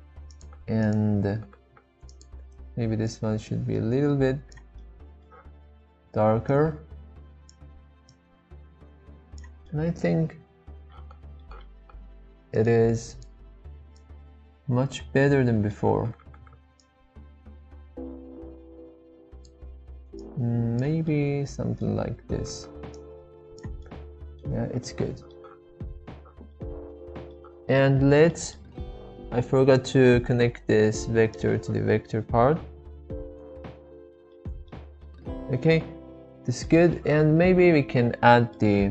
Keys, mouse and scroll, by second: 0.3 click, 4.8 middle click, 6.5-8.0 drag, 8.2-9.4 drag, 9.6-11.4 middle drag, 12.6-14.0 drag, 15.3 middle click, 17.2-19.5 drag, 20.4 click, 21.1-21.8 middle drag, 23.0 click, 23.9-24.4 middle drag, 24.9-25.3 middle drag, 26.5-27.3 middle drag, 28.4 middle click, 29.8-31.6 drag, 34.3 middle click, 35.0-35.8 middle drag, 36.9 shift+middle click, 37.8 middle click.